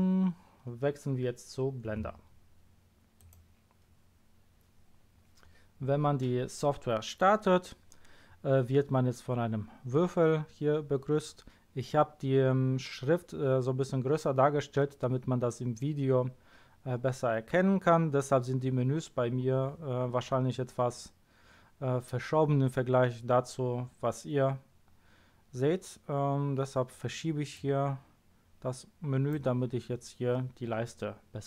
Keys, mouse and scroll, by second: 0.1-0.5 scroll up 2, 3.1 click, 27.5 click.